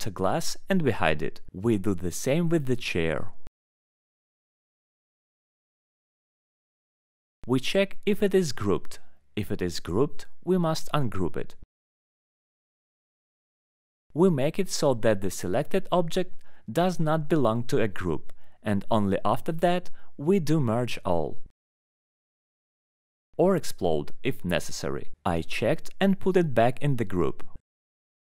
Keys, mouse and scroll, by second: 0.0 middle click, 2.1 right click, 2.2 click, 2.8 scroll, 4.1-4.8 scroll, 5.7 alt+middle click, 5.8 alt+middle click, 6.1 middle click, 7.4 click, 8.6 click, 9.3 click, 10.1 click, 10.1-10.5 scroll, 10.5 click, 11.8 click, 12.6 click, 13.2 alt+middle click, 13.6 click, 16.5 right click, 16.5 click, 18.8 click, 19.0 alt+middle click, 19.8 alt+middle click, 21.7 right click, 21.8 alt+click, 22.0 alt+middle click, 22.0-22.6 alt+scroll, 22.9 click, 24.2 click, 24.6 click.